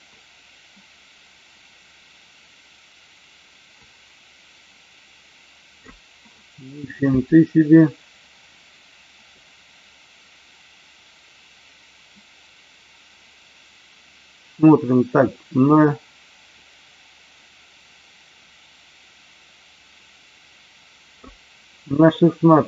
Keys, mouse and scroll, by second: 9.4-21.2 drag.